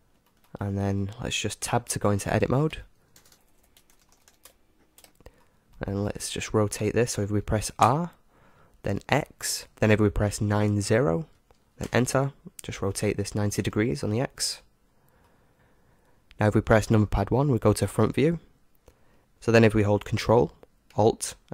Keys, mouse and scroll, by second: 2.6 Tab, 3.1-4.9 typing, 4.4 Return, 5.0 Tab, 5.0-7.8 middle drag, 7.8 r, 12.9-15.5 middle drag, 15.5 KP_1, 18.1-19.3 middle drag.